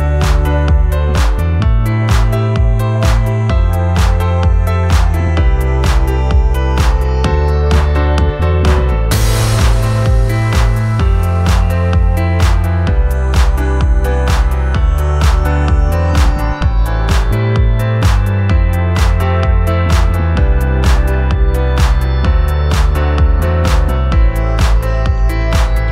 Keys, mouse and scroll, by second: 6.9 ctrl+t, 15.2 alt+click, 19.1 alt+click, 20.9 alt+click.